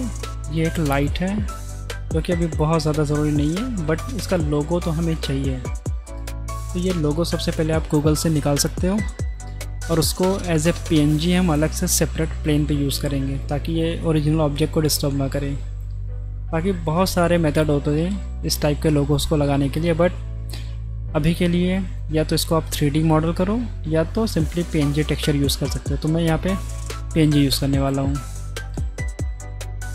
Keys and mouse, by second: 2.0 middle drag, 2.9 middle drag, 3.7 middle click, 4.7 middle click.